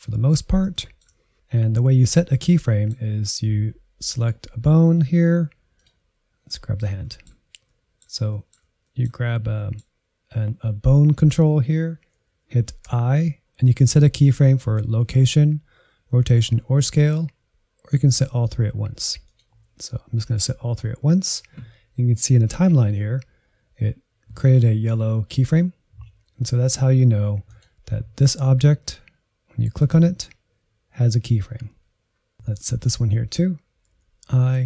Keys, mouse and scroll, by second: 1.1 scroll down 1, 1.3-2.4 scroll up 1, 2.4-4.2 middle drag, 4.2-6.5 drag, 6.5 middle click, 7.3-7.7 scroll up 1, 7.7-12.9 middle drag, 27.5-32.4 drag, 32.5-34.0 drag, 34.0 l.